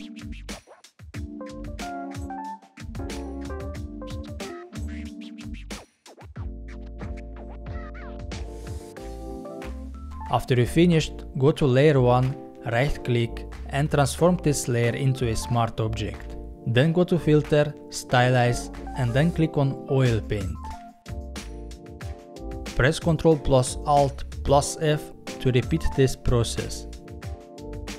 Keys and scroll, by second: 22.7 ctrl+alt+f.